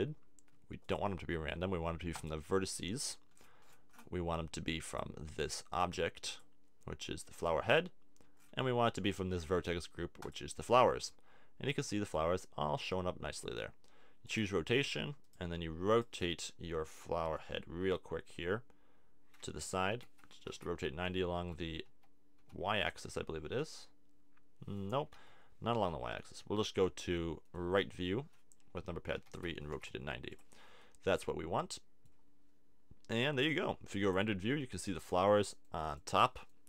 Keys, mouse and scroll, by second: 8.2-9.3 middle drag, 11.0 middle click, 12.1 middle click, 15.3 right click, 16.3 middle click, 17.8 r, 19.9 r, 23.0-24.7 drag, 25.1 super+z, 26.0 KP_3, 29.2 r, 30.4 click, 30.7 middle click, 31.7 middle click, 34.1 click.